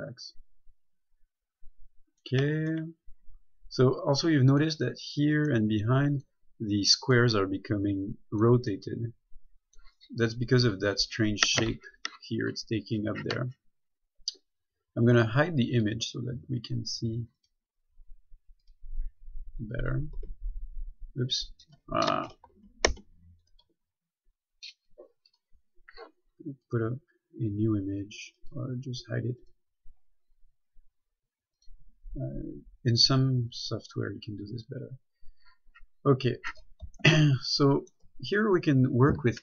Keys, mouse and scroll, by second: 0.1 middle click, 10.4 scroll up 1, 16.1 click, 19.8 scroll up 1, 20.2 scroll down 1, 20.4 Tab, 22.3 Tab, 22.8 ctrl+z, 23.9 a, 26.9 click, 34.5 scroll up 1, 35.1-36.2 scroll down 1, 36.2 scroll up 1, 37.3 shift+middle click, 38.6-39.4 scroll up 1.